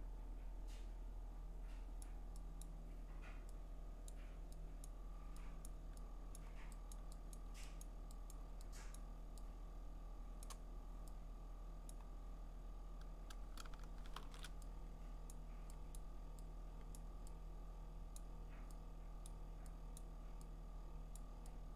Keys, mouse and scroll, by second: 2.0 click, 2.6 click, 4.1 click, 4.8 click, 5.7 click, 6.3 click, 6.9 click, 7.3 click, 7.8 click, 8.3 click, 8.9 click, 10.4 click, 11.9 click, 14.1 alt+shift+n, 15.3 click, 15.9 click, 16.9 click, 18.2 click, 20.0 click, 21.2 click.